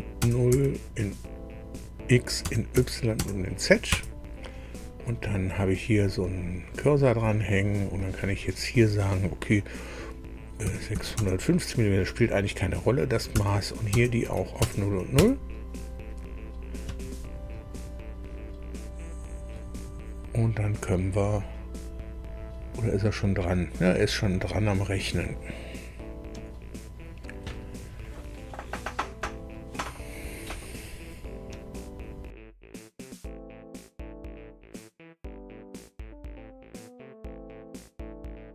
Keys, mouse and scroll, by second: 0.2 KP_0, 0.5 Tab, 2.4 KP_0, 2.7 Tab, 3.2 KP_0, 3.8 KP_Enter, 10.6 KP_6, 10.9 KP_5, 11.1 KP_0, 13.3 Tab, 13.9 KP_0, 14.2 Tab, 14.6 KP_0, 15.1 KP_Enter, 33.2 ctrl+alt+Left, 34.0 ctrl+alt+Left, 35.3 click.